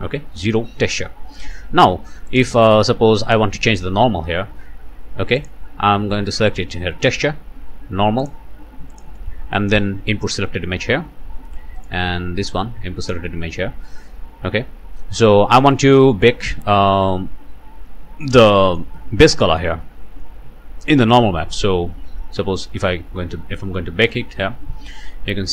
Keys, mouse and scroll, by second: 1.4 scroll down 1, 2.3 click, 3.6 click, 5.4 click, 6.5 click, 8.2 click, 8.9 click, 10.2 click, 11.8 click, 13.1-14.6 drag, 17.9-19.0 drag, 19.4 click, 22.6 click.